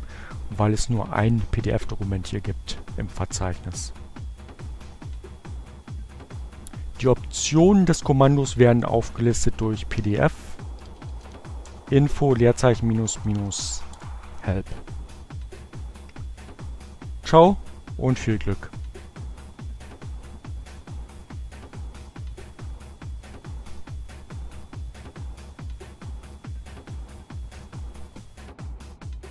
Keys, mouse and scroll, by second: 7.0-7.8 typing, 9.5-10.9 typing, 12.0-13.7 typing.